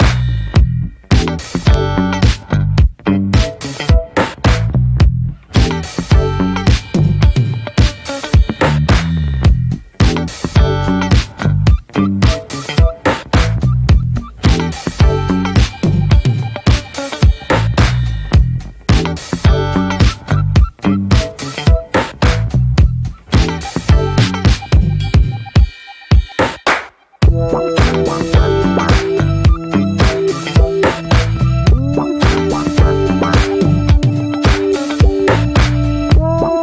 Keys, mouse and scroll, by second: 0.2 click, 1.6 click, 2.3 ctrl+z, 4.0-6.3 drag, 9.5-12.2 drag, 12.2-12.9 scroll up 1, 12.9-18.2 drag, 20.8 scroll down 4, 21.0-21.5 scroll up 2, 21.8 shift+middle click, 22.0-22.8 scroll down 4, 22.3 middle click, 23.2-24.2 shift+middle drag, 24.5 shift+middle click, 25.1 scroll up 1, 25.5 alt+middle click, 26.2 scroll up 1, 26.4 shift+middle click, 26.9-29.2 scroll up 1, 31.3-33.3 drag, 35.7 click, 36.1-36.4 scroll down 2, 36.4-36.6 scroll up 2.